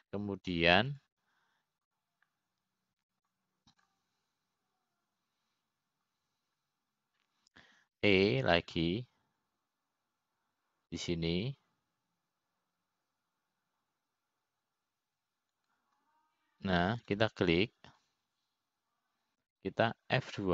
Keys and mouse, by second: 5.4-7.5 drag, 10.7 e, 19.7-20.5 drag.